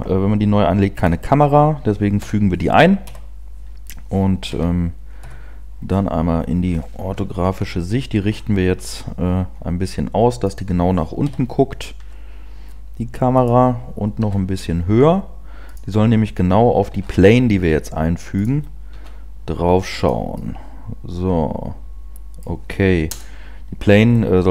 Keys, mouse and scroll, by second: 2.2 KP_0, 3.0 KP_1, 4.5 KP_Decimal, 5.6 KP_5, 5.9 scroll down 3, 7.0 KP_8, 7.0 KP_7, 7.5 KP_7, 8.2-9.3 scroll down 4, 9.3 r, 10.6 click, 11.2 KP_1, 12.0 r, 13.7 click, 14.2 g, 15.8 click, 17.1 shift+a, 18.9 s, 20.0 click, 20.4 middle click, 23.0 KP_0.